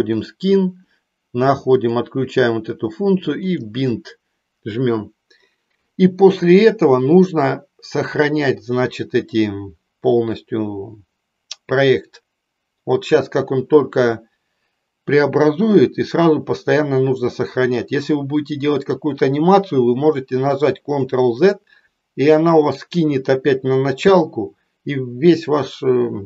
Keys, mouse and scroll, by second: 0.3 click, 1.8 click, 3.4-23.9 drag.